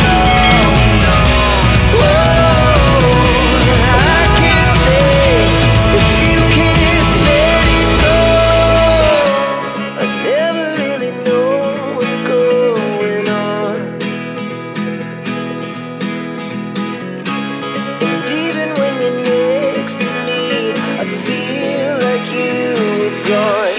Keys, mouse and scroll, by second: 3.8 click, 5.2 click, 6.6 click, 7.9 click, 9.0 click, 11.5 click, 13.2 click, 14.9 click, 17.9 click, 18.7 ctrl+p, 23.1 click.